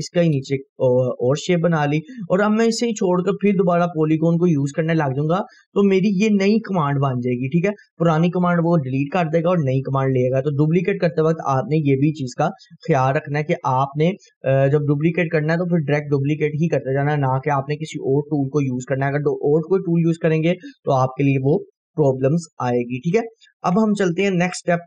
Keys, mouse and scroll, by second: 1.9 right click, 2.3-4.4 scroll down 2, 11.0-11.4 drag, 18.4-19.9 drag, 22.8 Delete.